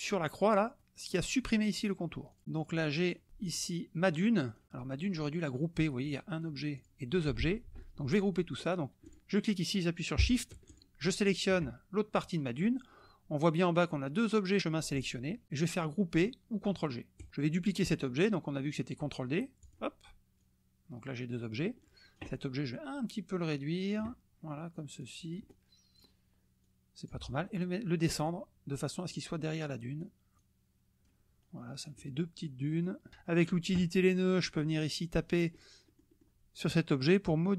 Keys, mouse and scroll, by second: 0.4 click, 2.5 click, 3.0 click, 3.5 drag, 4.5 click, 6.1 click, 6.7-7.3 drag, 7.4 ctrl+z, 8.8 click, 9.0 click, 10.7 shift+click, 17.2 click, 19.6 click, 20.4-21.7 drag, 21.8 click, 23.2-24.1 drag, 25.0-26.2 drag, 26.7 click, 28.2 click, 30.0 click, 31.4 click, 32.8 click, 34.3 click, 35.4 click, 35.8 click, 37.2 click.